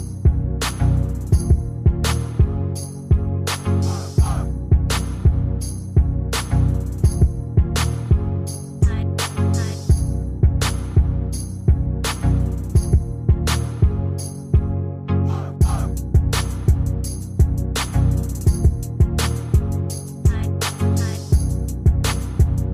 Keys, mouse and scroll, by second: 0.9 ctrl+alt+Tab, 1.2 ctrl+v, 6.3 shift+click, 8.6 ctrl+click, 10.1 ctrl+click, 11.3 ctrl+click, 12.5 ctrl+click, 14.1 ctrl+click.